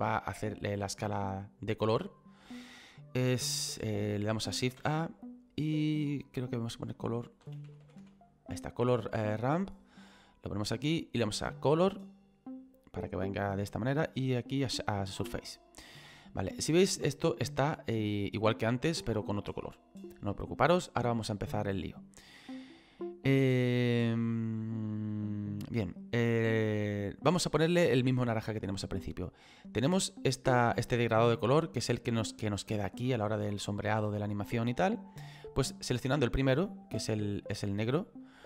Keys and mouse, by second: 1.9 click, 5.8 click, 9.6 click, 10.6 click, 11.7 click, 14.5 click, 17.4 click, 19.5 click, 21.8 click, 24.1 click, 30.8 click, 33.4 middle click, 35.8 click.